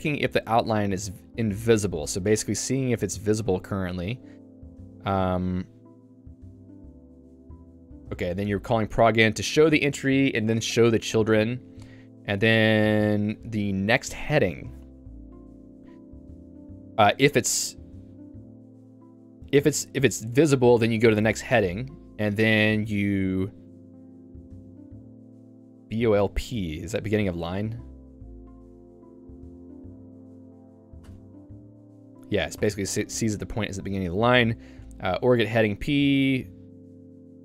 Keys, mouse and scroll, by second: 0.9 h, 3.5 j, 3.9-4.9 h, 8.5-9.7 l, 11.3-12.5 typing, 15.4-17.5 typing, 20.1-22.5 typing, 24.5 l, 24.7-26.8 l, 28.4 ctrl+g, 31.4 Return, 32.7 q, 34.7 h, 34.9 h, 35.7 j.